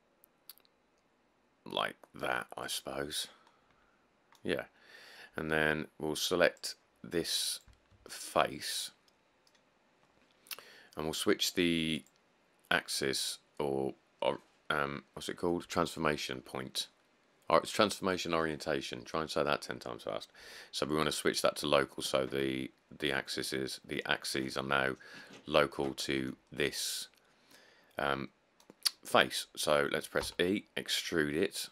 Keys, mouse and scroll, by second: 30.4 e.